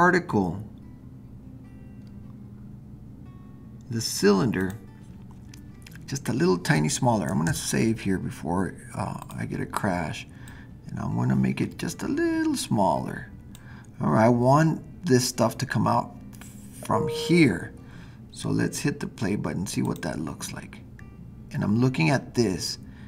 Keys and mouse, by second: 4.6 click, 7.5 super+s, 9.3 drag, 10.4-13.5 drag.